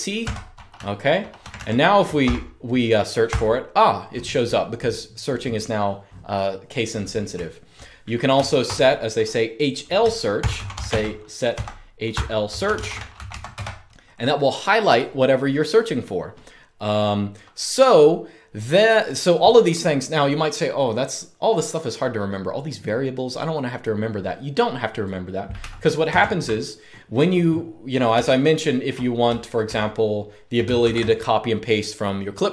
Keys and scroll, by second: 0.0-1.9 typing, 3.0 typing, 7.0-7.6 typing, 10.1-13.5 typing, 25.8 super+space, 27.8-29.0 k, 29.0 j, 29.3 j, 30.5 shift+v.